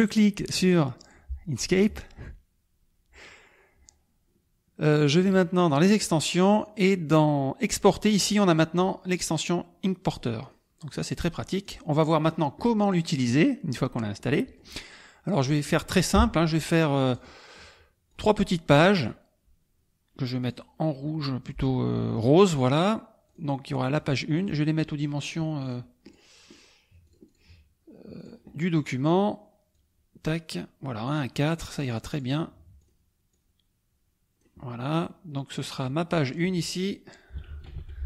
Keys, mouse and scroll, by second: 0.9 click, 5.6 click, 10.5 click, 11.6 click, 12.8-14.0 middle drag, 14.2 middle click, 17.1 click, 18.0-19.2 drag, 20.4 click, 22.2 click, 23.2 click, 23.9-24.5 drag, 25.6 click, 26.0 click, 26.5 click, 27.0-27.5 drag, 28.1 click, 29.7-30.4 drag, 31.0-32.3 drag, 32.7 click, 33.3-34.5 drag, 35.7 click, 36.2 click, 37.1-38.0 typing.